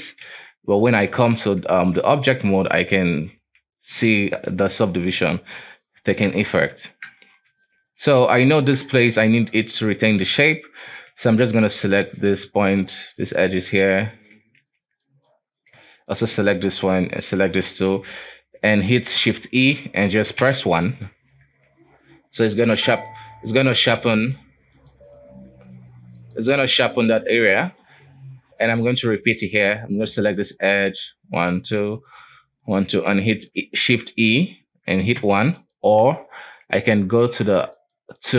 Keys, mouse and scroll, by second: 0.4 ctrl+s, 1.8 Tab, 2.4-3.6 scroll down 2, 3.6 Tab, 5.3-5.9 scroll up 3, 5.9-6.4 scroll down 2, 6.4 Tab, 6.8 alt+a, 7.3 shift+middle click, 7.7-8.5 scroll up 3, 8.5 right click, 9.2 shift+right click, 10.9 right click, 12.3 shift+right click, 13.8 shift+right click, 14.9 b, 16.2 shift+right click, 17.1 shift+right click, 17.5 shift+right click, 18.4-19.7 scroll down 2, 19.7 shift+e, 21.6 Tab, 22.5-23.1 scroll up 3, 23.1-26.1 shift+middle drag, 26.3 click, 26.7-27.7 scroll down 2, 27.7-28.8 scroll up 2, 28.8 Tab, 29.3 alt+a, 30.1 right click, 31.0 shift+right click, 31.5 shift+right click, 32.3 shift+right click, 32.8 shift+right click, 34.4 shift+e, 36.1 n, 37.9 click.